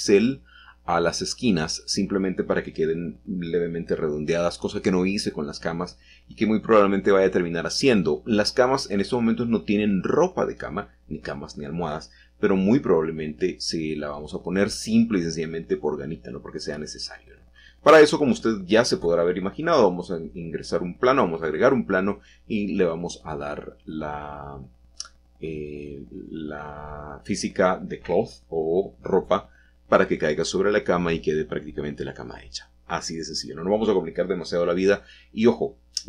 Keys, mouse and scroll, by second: 0.1 shift+click, 0.6 shift+click, 2.1 shift+click, 3.7 ctrl+b, 6.3 click, 7.8-8.8 shift+middle drag, 10.6 ctrl+z, 11.7 ctrl+b, 14.3-15.0 scroll up 2, 15.0-16.0 scroll up 1, 17.0-18.0 scroll up 2, 19.7 shift+click, 20.6 shift+click, 21.3 middle click, 22.1 middle click, 22.6-24.1 shift+drag, 23.6-25.2 scroll down 1, 25.2 shift+middle click, 25.6-28.4 shift+drag, 26.4 shift+middle click, 28.9 ctrl+middle click, 29.8 ctrl+b, 34.1-36.0 shift+drag, 34.5 ctrl+b.